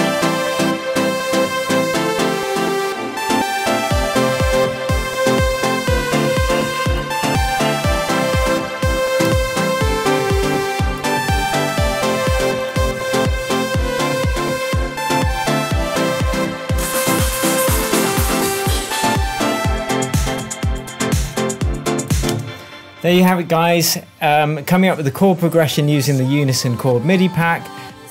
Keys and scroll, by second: 9.3 super+c, 12.8 super+v, 18.4 |, 22.2 space.